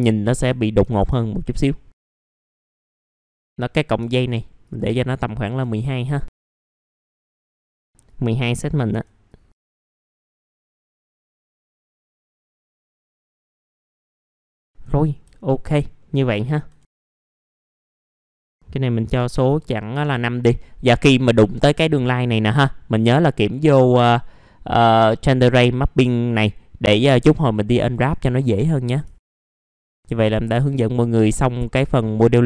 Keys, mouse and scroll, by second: 0.3-1.3 drag, 1.3 click, 1.8 scroll up 1, 1.9 F4, 2.3 click, 2.7 KP_1, 3.2 middle click, 3.3 F4, 3.3 scroll up 1, 3.9 scroll down 2, 4.0 F4, 4.6 click, 5.3 middle click, 5.4 scroll down 1, 5.7 alt+middle click, 6.7 click, 7.6 ctrl+z, 7.6-9.8 drag, 10.2 middle click, 10.5 click, 10.9 w, 11.0 click, 11.5 r, 11.7 click, 12.1 alt+middle click, 12.3 scroll down 1, 12.4 F4, 12.6 click, 12.9 alt+middle click, 13.2 alt+middle click, 13.7 scroll up 1, 13.9 alt+middle click, 14.2 middle click, 14.2 scroll down 1, 14.6 alt+middle click, 14.9 scroll down 1, 15.3 alt+middle click, 16.0 middle click, 17.1 alt+middle click, 17.2-17.5 scroll down 2, 17.3 middle click, 17.5 middle click, 17.6 scroll up 1, 17.8 click, 19.9 Return, 20.5 middle click, 21.2 F4, 23.3 click, 28.4 F4, 28.8 scroll down 1, 29.0 F4, 29.3 click, 29.5 middle click, 29.8 scroll down 1, 30.0-30.4 scroll up 1, 30.4 click, 30.9 alt+middle click, 32.1 alt+middle click.